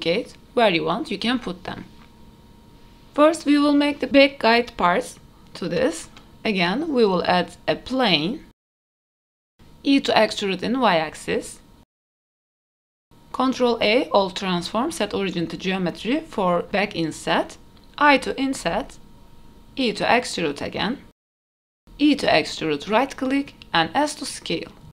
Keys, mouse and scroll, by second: 0.0-3.0 typing, 0.8 middle click, 0.9 scroll up 3, 1.0 shift+middle drag, 1.8 middle click, 1.8 click, 4.3-4.7 middle drag, 5.2-8.8 typing, 5.5 middle click, 9.0 ctrl+z, 9.2 Tab, 9.4 middle click, 10.0 Tab, 10.9 a, 11.6 e, 12.8 middle click, 13.2 middle click, 13.2 scroll up 1, 13.2 i, 13.5 Tab, 14.2 ctrl+a, 15.0-16.1 right drag, 16.5 middle drag, 16.8 Tab, 17.1 click, 17.1 3, 18.2 i, 20.2-21.3 middle drag, 21.4 e, 23.3-24.4 middle drag, 24.8 e.